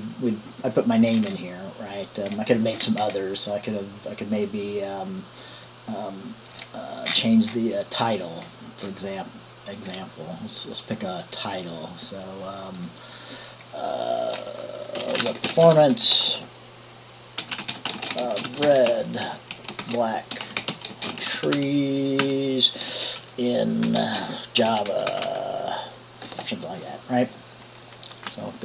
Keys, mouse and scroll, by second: 0.5 click, 1.5 click, 8.6-9.7 scroll up 2, 15.1-25.9 typing, 15.2 click.